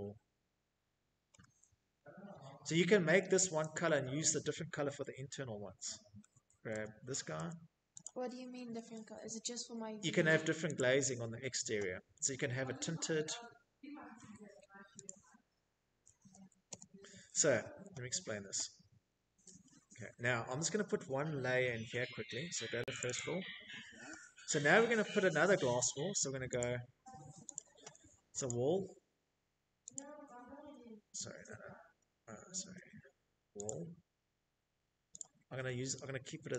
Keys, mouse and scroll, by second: 0.5 shift+middle click, 1.3 click, 1.9 middle click, 2.0 middle click, 2.1 middle click, 2.2 Escape, 2.5 Escape, 3.8 Tab, 4.3 Tab, 5.0 Tab, 11.0 click, 12.7 click, 13.4-14.8 typing, 16.6 Escape, 16.8 Escape, 20.6 right click, 20.8 right click, 21.7 middle click, 21.7 click, 21.7 scroll, 22.4-25.3 middle click, 22.6-23.0 scroll, 24.2 click, 25.1 click, 25.3 Escape, 25.5 Escape, 26.1 click, 27.6 click, 30.1 Escape, 30.3 Escape, 31.3 click, 32.8 click, 34.2 click.